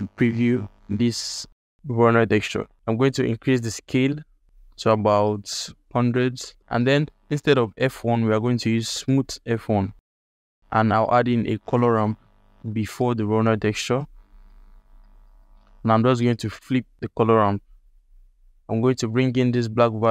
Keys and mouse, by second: 0.7 ctrl+alt+middle click, 1.5 click, 1.8 g, 2.7 ctrl+alt+middle click, 2.7-4.3 drag, 5.2-6.4 drag, 6.1 KP_0, 6.6 alt+shift+click, 6.9 ctrl+alt+click, 7.8-9.1 drag, 10.0 ctrl+click, 10.1 ctrl+alt+middle click, 10.4 alt+click, 10.6 shift+a, 14.4 ctrl+alt+click, 15.0 alt+shift+click, 15.5 ctrl+alt+middle click, 16.2-16.9 drag, 18.7-20.1 drag.